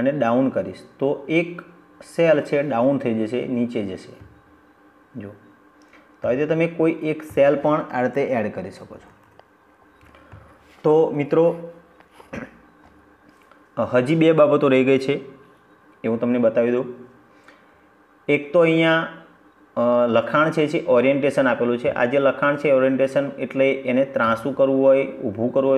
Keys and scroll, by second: 7.9 ctrl+z.